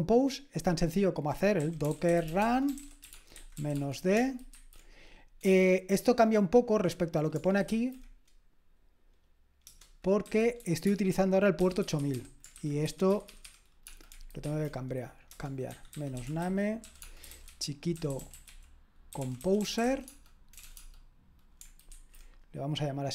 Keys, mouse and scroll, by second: 1.3-5.4 typing, 9.6 Return, 10.2-20.8 typing, 21.9 typing.